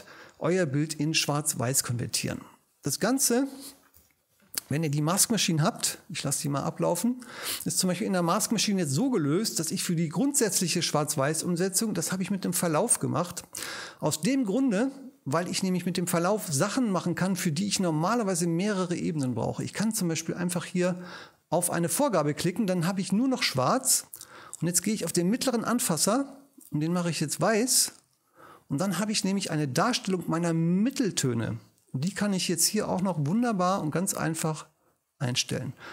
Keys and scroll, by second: 4.0 shift+BackSpace, 5.7 F3.